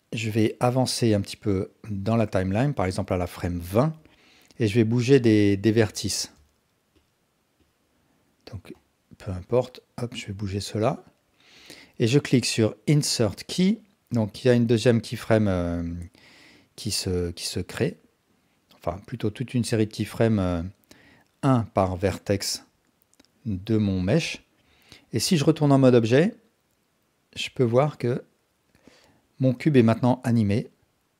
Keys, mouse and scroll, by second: 0.8-2.7 drag, 3.3 ctrl+alt+click, 6.2 shift+space, 7.7 drag, 9.4 click, 10.9-11.4 drag, 13.3 click, 18.2 click, 23.8-24.6 drag, 25.2 Tab, 26.2-29.5 drag, 29.6 space.